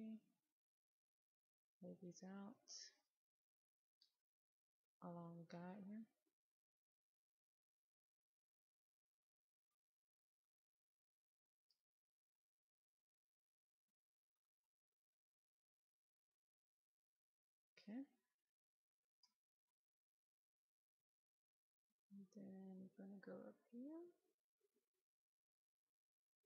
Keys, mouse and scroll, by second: 1.6 ctrl+click, 3.5 ctrl+click, 7.7 ctrl+click, 10.4 ctrl+click, 11.4 ctrl+click, 15.2 ctrl+click, 16.1 ctrl+click, 17.7 ctrl+click, 19.5 middle click, 24.4 click.